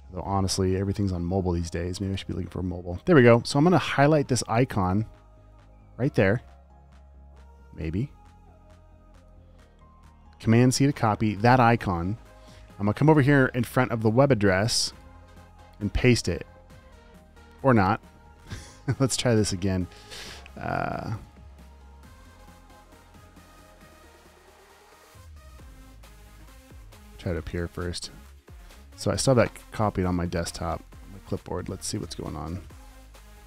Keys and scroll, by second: 10.9 super+c, 14.4 t, 16.0 super+v, 17.1 super+z, 18.8 space, 19.2 space, 19.5 space, 19.8 space, 21.9 alt+super+space, 23.8 super+v, 24.4 super+z, 25.5 space, 26.5 space, 26.8 space, 27.9 super+v.